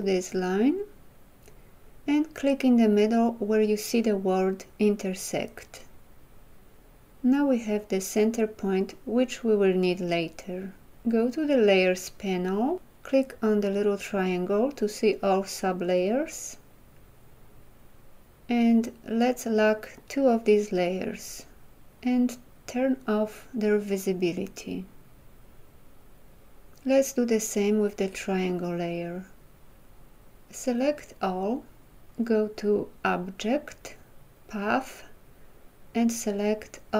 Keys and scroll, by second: 31.5 ctrl+a.